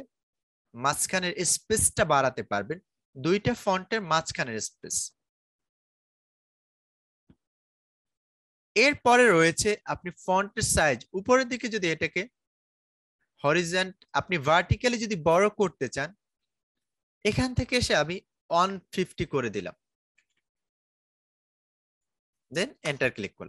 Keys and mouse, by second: 6.9-22.7 drag, 22.7 Return.